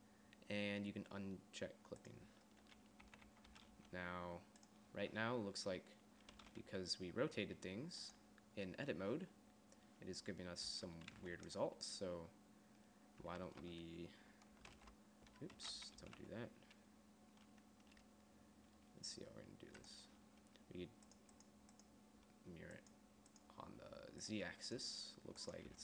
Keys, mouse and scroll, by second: 3.3-3.7 a, 3.9 g, 6.6 r, 10.9 Tab, 11.4 g, 13.5 Tab, 15.8 alt+r, 15.8 ctrl+z, 21.3-25.8 drag.